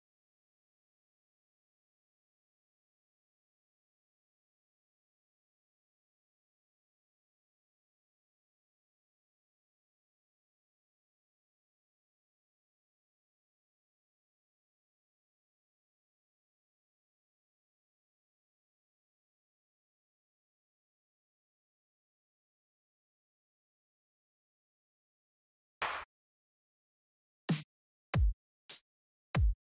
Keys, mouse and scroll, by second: 0.6 click, 5.7 click, 6.9 click, 7.8 click, 8.7 click, 9.0 click, 10.0 Down, 11.4 click, 11.7 Up, 12.8 click, 13.4 click, 14.2 Down, 15.1 click, 16.3 click, 17.1 click, 19.2 click, 20.3 click, 21.4 click, 25.0 click, 25.5 click, 27.2 click, 27.8 Up, 29.3 Down.